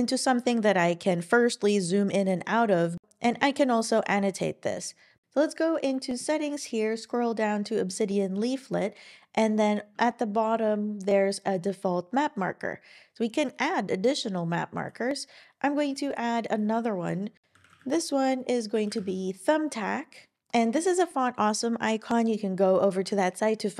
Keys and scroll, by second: 17.4-19.5 typing.